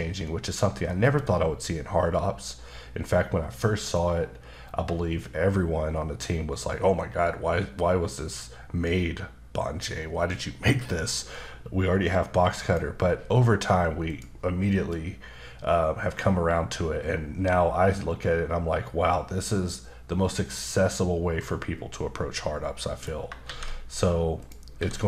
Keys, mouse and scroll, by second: 12.6 click, 14.1 click, 14.9 middle click, 23.4 shift+a, 24.4 click, 24.8 s.